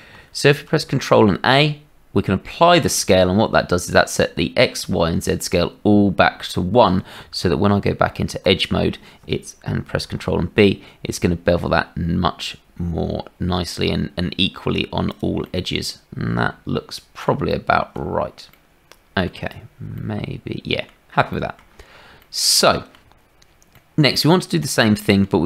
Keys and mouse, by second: 0.5 ctrl+a, 7.2 Tab, 9.9 ctrl+b, 15.4-17.2 middle drag, 17.4 shift+middle click, 18.5 middle click, 19.9 middle click, 21.3 shift+click, 22.2 middle click, 23.7-25.2 middle drag.